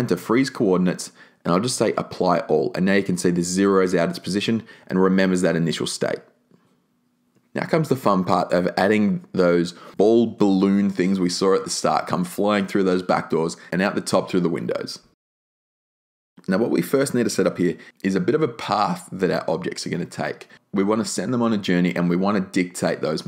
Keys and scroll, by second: 5.2 0, 5.4 Return, 14.3 s.